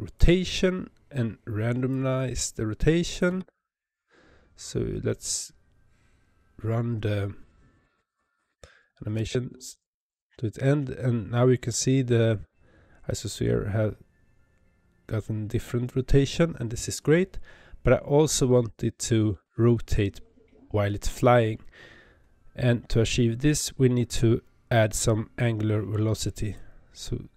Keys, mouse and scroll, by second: 0.1 click, 1.9-3.2 drag, 3.2 space, 9.0 space, 18.3 space, 26.5-27.3 drag.